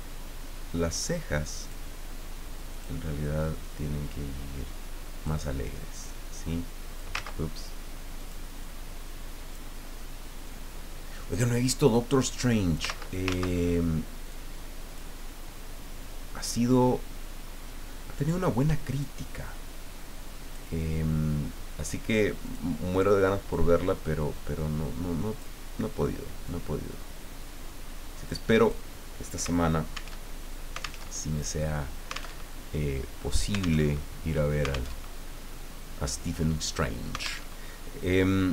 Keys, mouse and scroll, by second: 0.7 click, 2.7 click, 3.4-5.6 drag, 6.1 click, 7.1 ctrl+z, 8.2 click, 8.6-9.8 drag, 10.5-12.9 drag, 13.3 ctrl+z, 14.3 click, 16.4-18.7 drag, 19.0-20.7 drag, 22.4 click, 23.5-25.6 drag, 26.5-28.5 drag, 28.6 click, 30.2 alt+Tab, 31.0 alt+Tab, 32.3 alt+Tab, 33.8 alt+Tab, 35.0 alt+Tab, 37.5 alt+Tab.